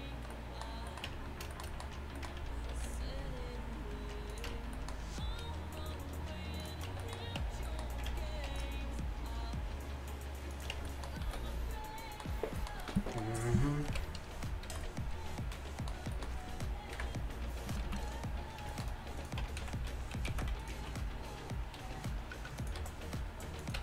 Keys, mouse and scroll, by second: 1.1 Tab, 2.8 ctrl+r, 4.5 Tab, 5.9 t, 6.7 click, 7.0 t, 7.4 Tab, 8.5 ctrl+r, 10.8 Tab, 11.3 a, 13.9 alt+h, 14.7 a, 17.0 KP_1, 17.9 z, 19.3 middle click, 19.5 Tab, 19.7 z, 20.3 click, 20.3 z, 21.8 r, 22.9 g.